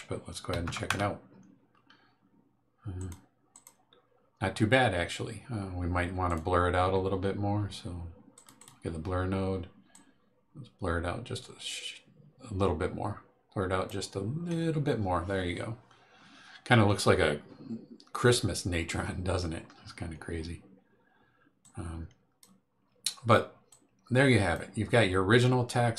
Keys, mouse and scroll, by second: 0.5 KP_4, 0.6 KP_0, 0.9 KP_Enter, 3.0 click, 3.5 click, 6.2 click, 8.3 click, 9.9-14.0 drag, 21.6 click, 23.7-24.7 drag, 25.3-25.9 drag.